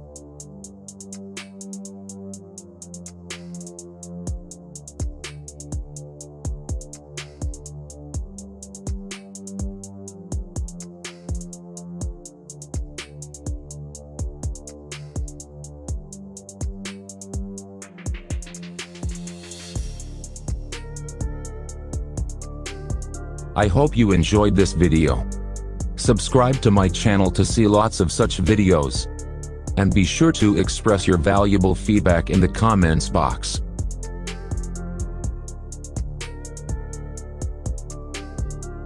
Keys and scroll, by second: 0.6 shift+Page_Down, 4.8 shift+F2, 5.3 Escape, 9.8-10.8 typing, 11.8 Return, 12.0-14.7 typing, 37.4 ctrl+z.